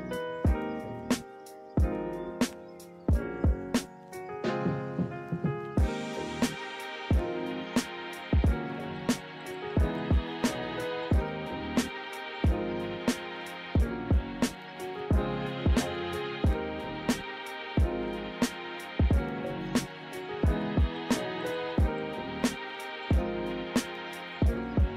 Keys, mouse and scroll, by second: 6.1 ctrl+-, 6.4 ctrl+=, 11.2 ctrl+-, 17.1 ctrl+-, 17.4 ctrl+=, 23.4 ctrl+-.